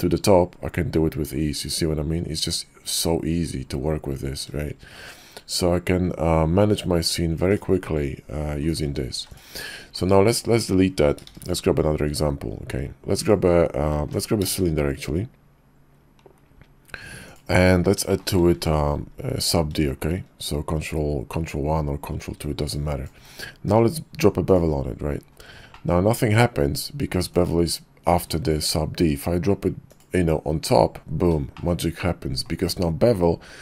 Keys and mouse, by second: 8.7 click, 9.1 x, 10.0 click, 10.2 x, 11.3 shift+a, 14.0 x, 14.5 shift+a, 18.6 ctrl+1, 22.8 click, 23.6 q, 25.7 click, 32.0 click.